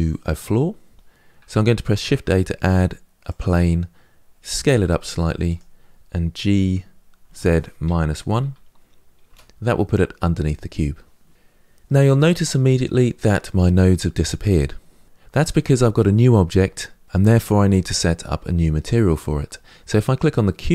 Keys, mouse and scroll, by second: 3.1 shift+a, 4.4 s, 6.3 g, 20.6 click.